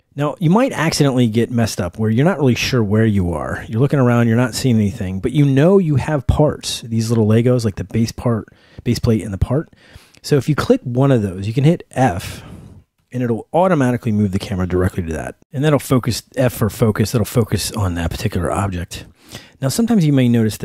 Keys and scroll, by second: 1.6 w, 13.0 f, 16.0 s, 18.0 w.